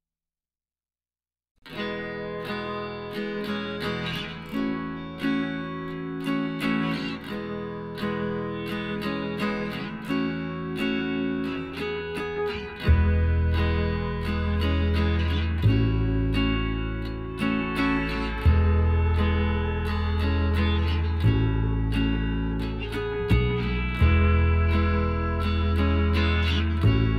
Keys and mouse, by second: 0.4-2.2 middle drag, 10.1 KP_3, 10.7 middle click, 11.1 KP_1, 12.2 z, 13.7 e, 15.1-17.0 drag, 18.8 s, 21.4 s, 23.2-25.6 drag, 26.1 ctrl+z, 26.7 ctrl+z.